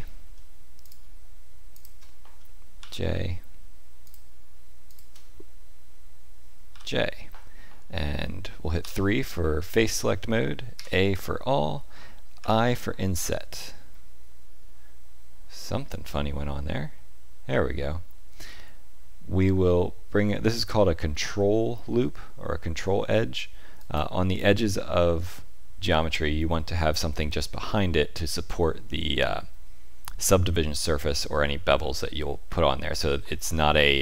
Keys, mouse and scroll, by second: 0.8 click, 1.7 shift+click, 2.7 j, 4.0 click, 4.8 shift+click, 6.7 j, 8.8 3, 10.7 a, 12.3 i.